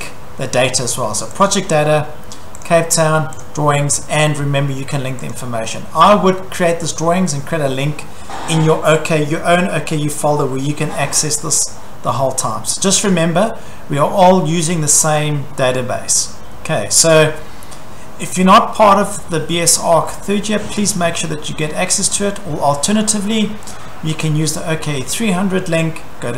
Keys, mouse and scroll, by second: 1.5 click, 2.7 click, 3.4 click, 5.3 click, 22.2 click, 24.2 click.